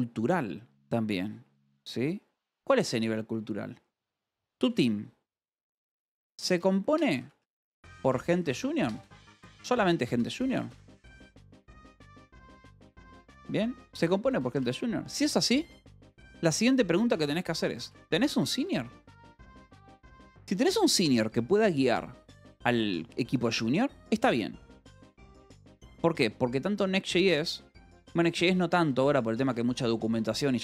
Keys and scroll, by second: 3.9-14.4 typing, 17.4-19.6 typing, 20.2 Escape.